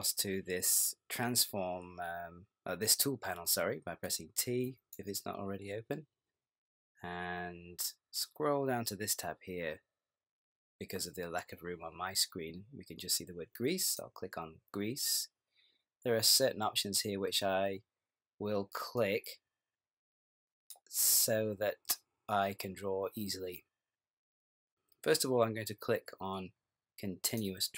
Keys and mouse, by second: 3.4 t, 4.1 t, 4.7 t, 5.0 t, 13.9 click, 19.0 click, 27.3 click.